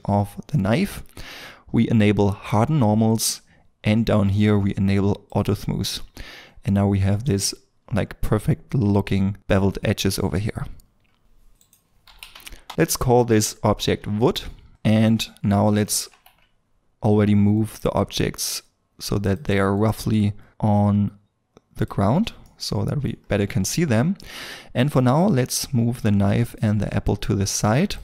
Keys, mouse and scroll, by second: 0.5 middle click, 6.2-6.7 scroll down 1, 6.7 middle click, 10.2 middle click, 10.7-11.3 scroll down 1, 11.6 double click, 12.0 typing, 12.7 Return, 14.7 middle click, 14.9 scroll up 1, 16.1 KP_1, 16.6 scroll up 1, 22.1 scroll down 1, 22.4 middle click, 23.1 scroll down 1, 23.7 middle click.